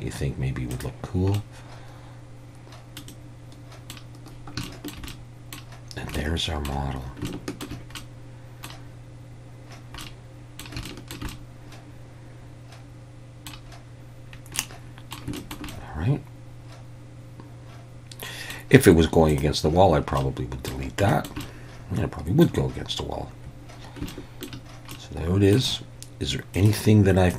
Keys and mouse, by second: 1.4-3.0 middle drag, 3.1-3.9 middle drag, 4.7 shift+middle drag, 5.1-5.6 middle drag, 6.2-6.7 middle drag, 7.3-7.7 shift+middle drag, 8.0-8.7 middle drag, 10.0-10.6 middle drag, 10.9 shift+middle drag, 11.3-13.5 middle drag, 14.6-15.1 middle drag, 15.4 shift+middle click, 15.7-18.5 middle drag, 19.4-20.2 drag, 20.2-20.7 middle drag, 21.1 shift+middle drag, 21.5-22.4 middle drag, 24.1-24.5 shift+middle drag, 24.9-25.6 middle drag.